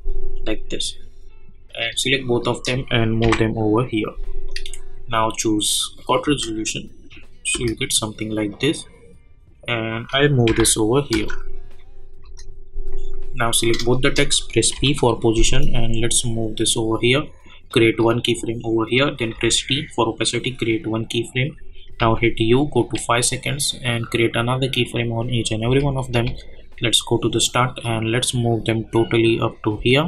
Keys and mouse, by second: 2.2 shift+click, 3.2 [, 4.4-6.0 drag, 6.2 space, 8.5-10.4 drag, 10.4 [, 11.1 space, 12.9 click, 13.9 shift+click, 14.7 p, 15.7-17.7 drag, 19.3 t, 20.3 click, 22.0 u, 22.8 click, 25.6 j, 26.3 j, 27.8-30.0 drag.